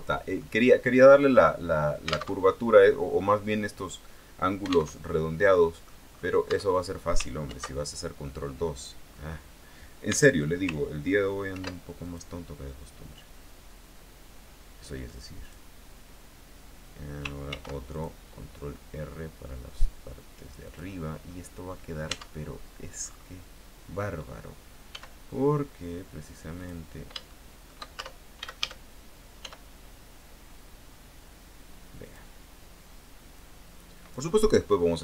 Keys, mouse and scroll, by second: 1.1-1.5 scroll up 2, 2.4 alt+Tab, 5.1 alt+Tab, 5.7 middle click, 6.3 scroll up 2, 6.6 Tab, 7.6 ctrl+2, 10.3 Tab, 10.8 ctrl+Tab, 11.7 ctrl+r, 12.2 ctrl+click, 15.6 click, 17.7 ctrl+r, 18.1 ctrl+click, 20.8 click, 21.4 scroll down 1, 21.5 middle click, 22.3 Tab, 22.7-23.0 scroll down 1, 23.2-23.5 scroll up 1, 25.1 s, 26.7 click, 27.4 shift+middle click, 28.1 shift+Tab, 28.6 shift+a, 29.5 s, 32.2 click, 33.5 click.